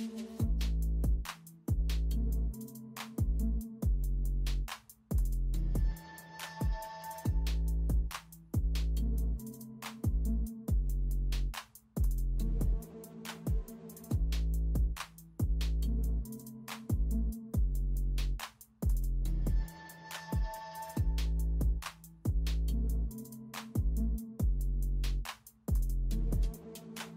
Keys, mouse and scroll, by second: 2.5 alt+Delete, 3.7 ctrl+s, 3.9 ctrl+s, 4.4 ctrl+d, 5.1 space, 7.3 alt+Delete, 7.4-9.2 typing, 10.1 ctrl+alt+z, 10.4-14.4 typing, 15.7 space, 17.4 space, 22.5 alt+Delete, 24.1 ctrl+alt+z, 25.8 alt+Delete, 26.6 [.